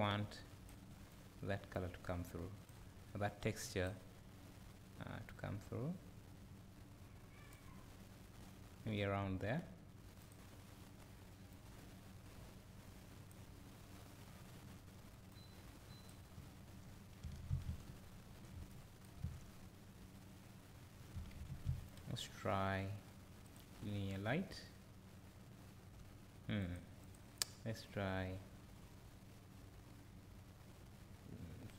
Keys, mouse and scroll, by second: 5.4-11.6 drag, 15.3-26.7 drag, 17.7 `, 19.2 `.